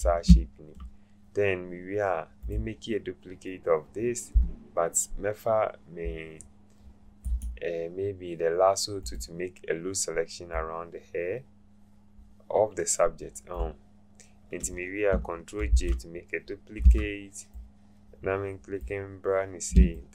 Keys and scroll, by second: 15.7 ctrl+j, 16.8 v.